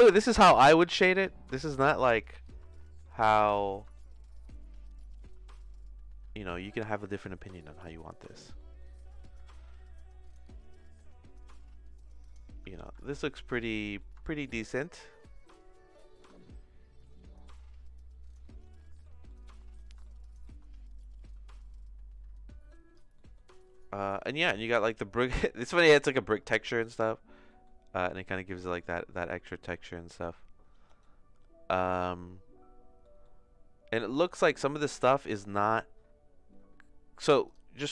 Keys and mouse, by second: 2.7 shift+middle click, 3.6 middle click, 3.9-6.7 shift+middle drag, 8.7 middle click, 9.3-12.3 drag, 12.8 ctrl+s, 13.7 middle click, 14.2-16.2 shift+middle drag, 18.4 middle click, 19.0 middle click, 19.5 middle click, 20.0 shift+middle click, 21.2-22.9 drag, 23.1 middle click, 23.8 middle click, 26.8 click, 28.1 click, 28.9 middle click, 33.0 middle click, 34.2 click.